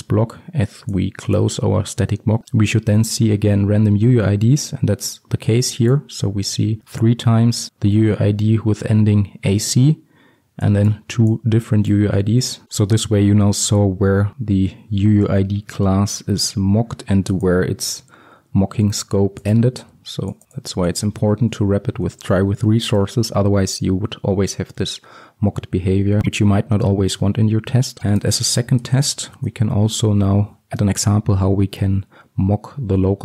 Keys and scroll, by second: 18.3 ctrl+x, 29.1 Return.